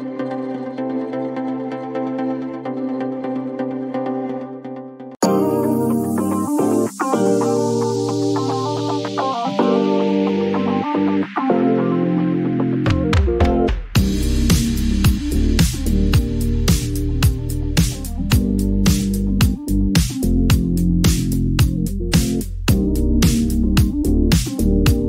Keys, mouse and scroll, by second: 0.3 click, 2.9 click, 6.6 click, 7.8-8.7 typing, 9.9 Return, 14.6 click, 17.5 click, 21.6-23.8 drag.